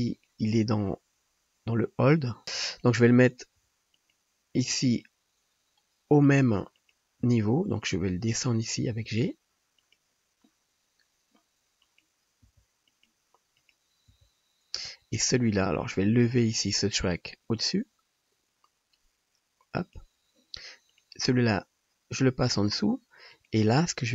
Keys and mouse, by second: 0.2 click, 2.4-6.8 drag, 2.7 middle click, 2.7 right click, 3.6 g, 4.7 g, 7.4 g, 8.2-24.1 drag, 8.3 right click, 9.1 g, 12.6 g, 13.6 middle click, 13.6 right click, 14.1 g, 15.2 middle click, 15.2 right click, 15.9 middle click, 15.9 right click, 20.9 middle click, 20.9 right click, 21.4 g.